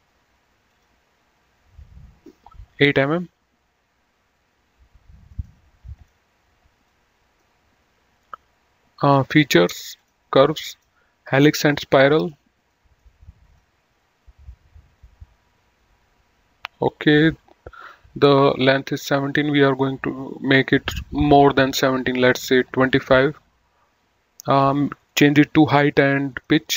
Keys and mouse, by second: 0.9 click, 3.1 KP_8, 3.3 Return, 5.6 right click, 6.2 click, 9.3 click, 12.1 middle click, 13.8 click, 22.5 click, 24.9 click, 26.5 click.